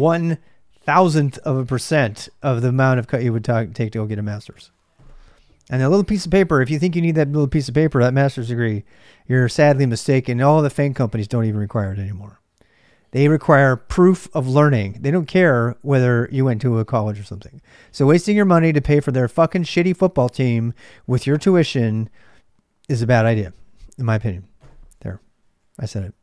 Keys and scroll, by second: 0.0-26.2 typing, 26.0 Return.